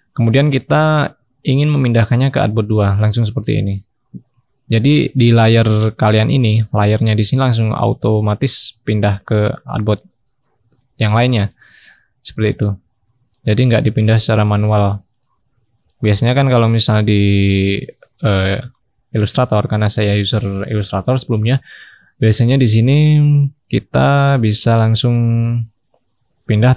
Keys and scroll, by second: 7.9-10.0 scroll up 1.